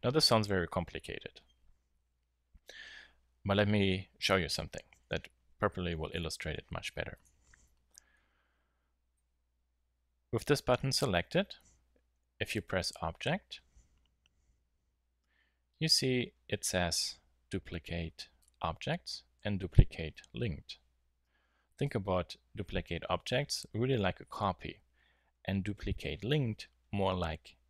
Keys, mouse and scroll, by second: 0.3 Tab, 4.9 KP_7, 6.1 click, 6.4 h, 8.3-9.2 middle drag, 12.4-14.3 drag.